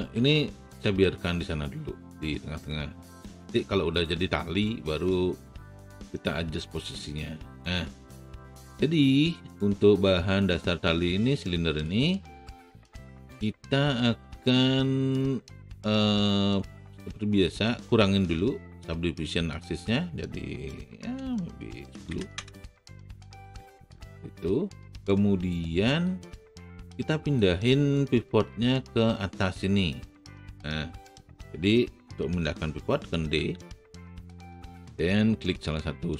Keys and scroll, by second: 0.8 ctrl+z, 22.0 KP_1, 22.0 KP_0, 22.3 Return, 33.3 d.